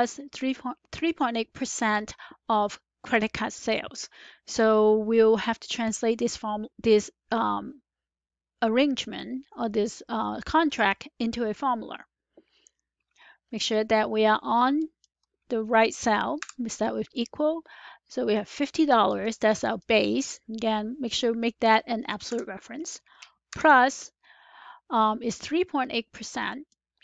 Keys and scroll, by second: 16.3 typing, 22.2 F4.